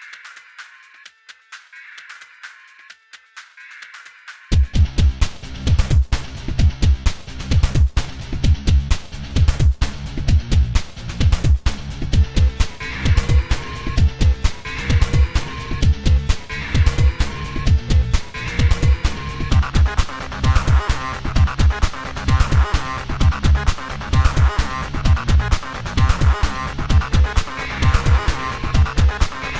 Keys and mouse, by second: 2.6 i, 7.6 a, 8.1-8.5 middle drag.